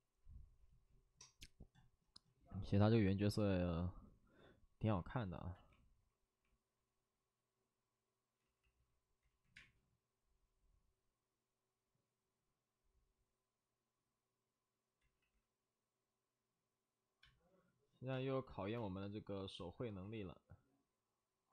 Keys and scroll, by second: 8.3 c, 8.3 ctrl+z, 8.5 ctrl+z, 9.2 ctrl+z, 9.5 space, 14.3 space, 14.9 ctrl+z, 17.2 ctrl+z, 17.2 space, 18.1 space, 18.7 space, 20.0 space, 20.0 ctrl+z.